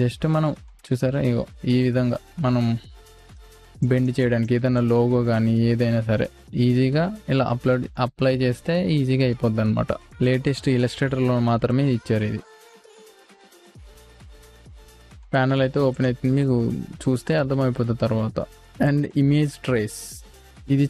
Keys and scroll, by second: 3.8 space, 15.1 Delete.